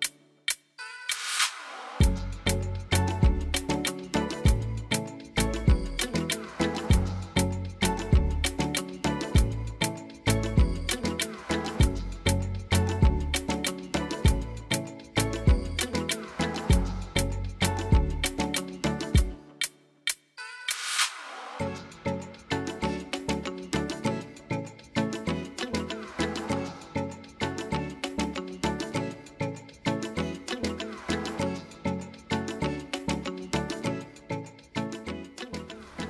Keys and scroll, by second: 34.8 ctrl+d.